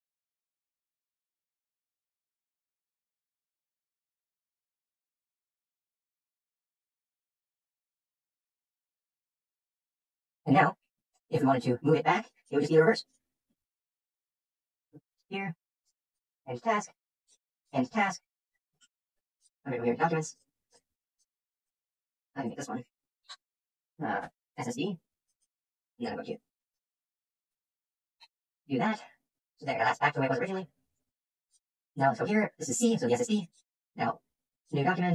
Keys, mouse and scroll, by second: 10.4-10.7 drag, 19.4 click, 19.7-20.2 scroll, 20.3 click, 20.7 click, 21.6 click, 22.4 click, 24.2-24.7 typing, 25.4 click, 25.9 click, 26.3 click, 27.1 click, 27.4 BackSpace, 28.4 click, 29.6 click, 31.5 click, 33.4 click, 33.5 click.